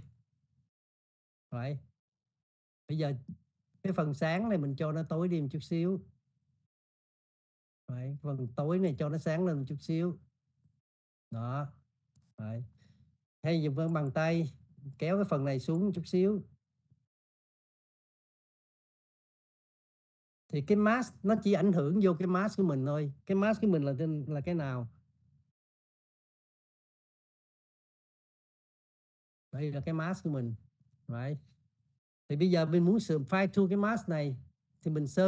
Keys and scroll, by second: 2.2 ctrl+0.